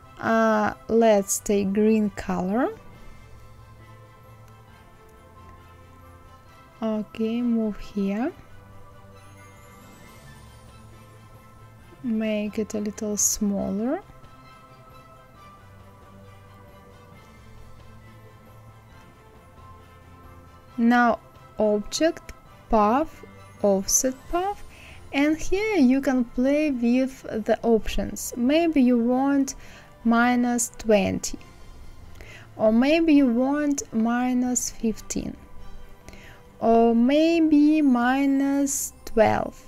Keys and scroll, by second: 27.5 KP_Subtract, 28.9 KP_2, 29.2 KP_0, 33.3 KP_1, 33.5 KP_5, 38.9 KP_2.